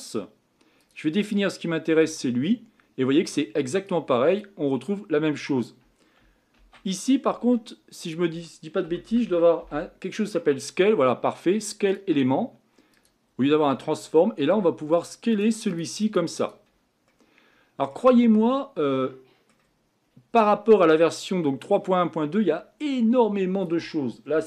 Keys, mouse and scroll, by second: 15.1-17.1 drag, 17.1-18.2 middle drag, 18.2-18.8 scroll up 4, 18.8-20.0 middle drag, 20.0-20.4 scroll down 2, 20.4-24.4 middle drag.